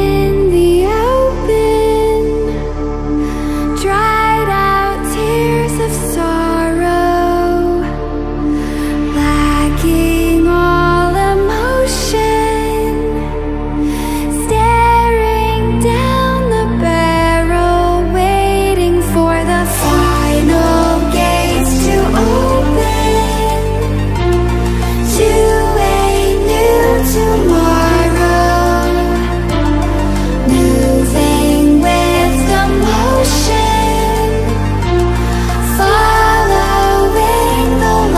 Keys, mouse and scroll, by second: 5.0-6.8 scroll up 2, 8.7-13.1 drag, 19.5 click, 24.6 click, 27.4-31.8 drag, 33.8 Escape, 35.0 click, 37.7 click.